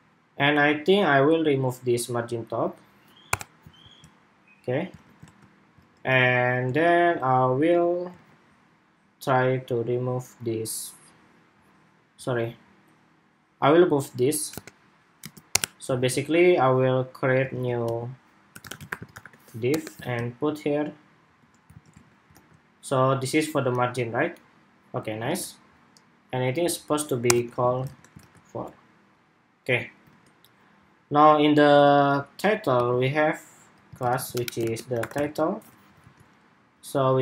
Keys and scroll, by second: 3.5 super+s, 4.8 super+Tab, 5.0 super+r, 5.5 super+Tab, 6.6 super+Tab, 7.9 super+Tab, 15.8 super+s, 17.3 super+x, 19.9 super+v, 21.5 super+s, 21.9 super+Tab, 22.1 super+r, 25.0 super+Tab, 27.6 super+Tab, 28.0 super+r, 29.8 super+Tab, 35.9 super+s.